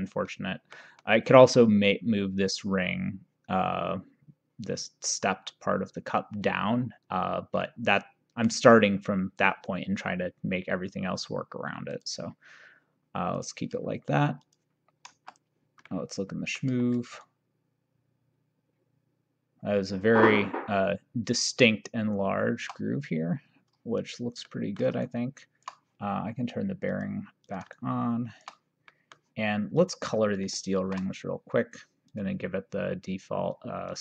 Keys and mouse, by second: 1.1 middle click, 7.7 middle click, 12.0 click, 13.5 click, 14.5 click, 15.1 KP_0, 15.9 middle click, 17.3 shift+right click, 24.1 click, 24.5 middle click, 25.1 shift+right click, 26.9 click, 27.8 shift+right click, 29.0 middle click, 29.8 click, 30.9 ctrl+d, 32.1 click, 33.9 click.